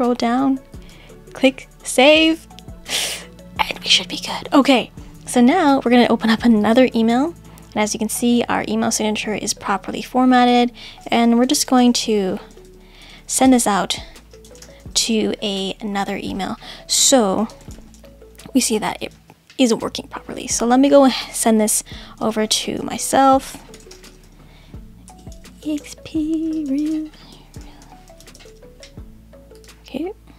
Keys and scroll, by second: 11.4 shift+t, 25.1 shift+2.